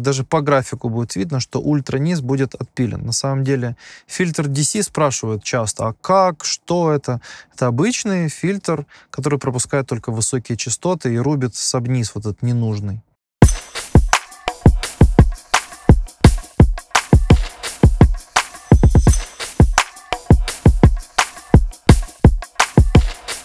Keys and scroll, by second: 13.3 space.